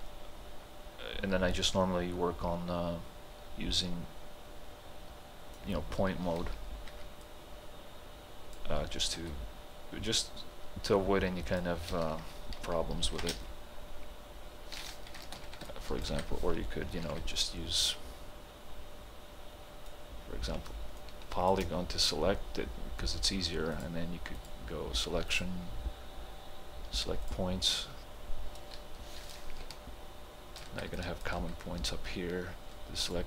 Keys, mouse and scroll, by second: 0.1-6.9 right drag, 6.9 y, 7.3-9.2 drag, 9.2 t, 9.3-13.1 drag, 13.1 ctrl+g, 13.3 space, 15.2 ctrl+space, 15.7-17.1 ctrl+alt+drag, 17.1 ctrl+h, 17.6-21.0 right drag, 21.0-23.8 shift+drag, 29.7 ctrl+alt+click, 32.1-33.2 right drag.